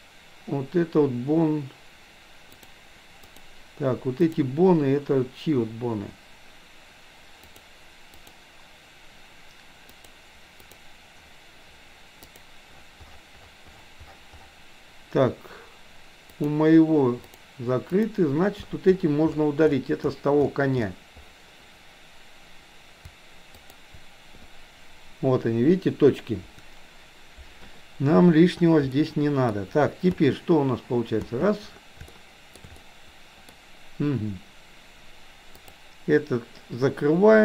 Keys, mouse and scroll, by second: 2.5 click, 3.2 click, 4.2 click, 7.3 click, 8.2 click, 9.9 click, 10.5 click, 12.3 click, 16.4 click, 17.2 click, 18.0 click, 23.7 shift+click, 28.9 middle click, 30.2 space, 31.6 space, 32.2 shift+middle click, 32.9 middle click, 35.7 click.